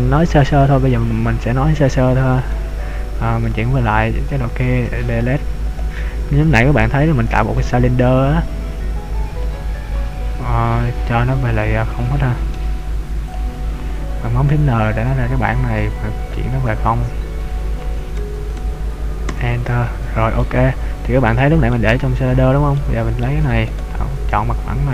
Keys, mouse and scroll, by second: 2.7 a, 3.7 Tab, 4.9 x, 6.1-6.7 scroll down 2, 7.1 shift+a, 12.5 n, 13.4-14.9 scroll up 4, 14.9 click, 16.2 click, 20.6 middle click, 22.1 Tab, 22.8 middle click, 23.9 right click.